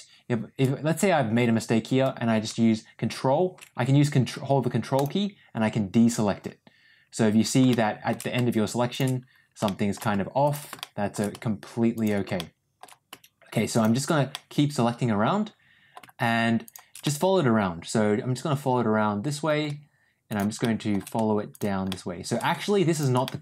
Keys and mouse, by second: 7.6 shift+middle click, 9.6 shift+middle click, 10.3 shift+click, 10.7 shift+middle click, 11.8 shift+click, 12.3 shift+middle click, 14.2-15.8 middle drag, 16.9-19.3 middle drag, 20.2 shift+click, 20.5 shift+middle click, 21.4 shift+click, 21.8 shift+middle click, 22.8 shift+click, 23.1-23.4 middle drag.